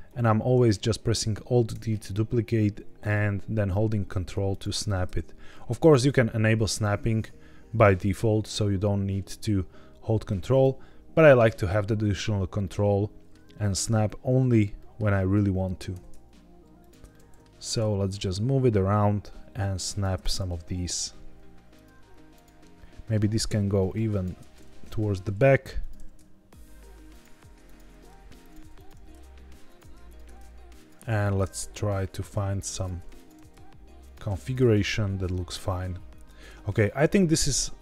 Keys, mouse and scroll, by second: 0.0 ctrl+click, 1.6 alt+d, 4.4 ctrl+click, 4.8 alt+d, 5.7 ctrl+click, 6.6 click, 7.7 alt+d, 10.4 click, 11.5 click, 12.5-13.2 middle drag, 14.7 middle click, 15.2 middle click, 15.8 g, 16.7 ctrl+click, 17.0 middle click, 17.5 alt+d, 19.8 ctrl+click, 20.4 KP_1, 21.6 click, 22.2 click, 22.7 middle click, 23.2 g, 24.0 ctrl+click, 24.7 KP_1, 25.7 click, 25.9 g, 27.0 ctrl+click, 27.6 click, 27.8 g, 28.3 ctrl+click, 28.7 click, 28.8 g, 29.6 ctrl+click, 30.0 click, 30.2 g, 30.7 ctrl+click, 31.1 click, 31.4 g, 33.1 click, 33.3 g, 33.9 ctrl+click, 34.3 click, 34.5 g, 36.1 ctrl+click.